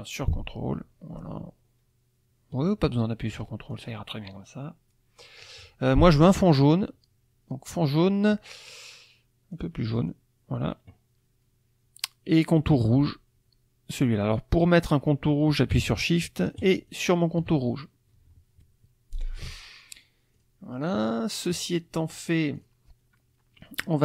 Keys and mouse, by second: 7.7 click, 9.5 click, 10.0 click, 16.6 shift+click, 19.1 click, 20.3 click, 21.2 click, 22.5 click, 23.6 middle click.